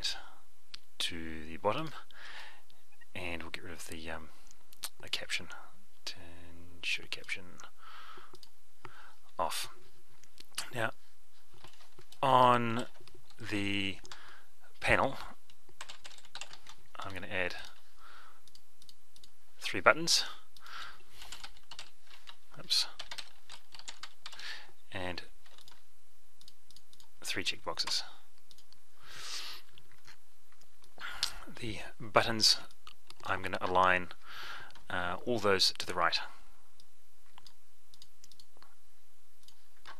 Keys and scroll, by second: 12.8 ctrl+alt+p, 34.6 F11.